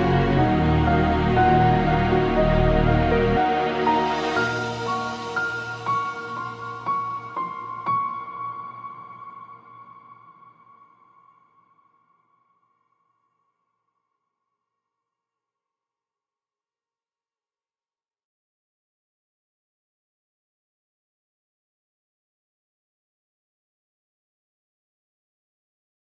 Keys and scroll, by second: 2.9 g, 18.7 F9, 19.5 F9, 20.5 shift+F2, 21.4 F9, 25.3 F3.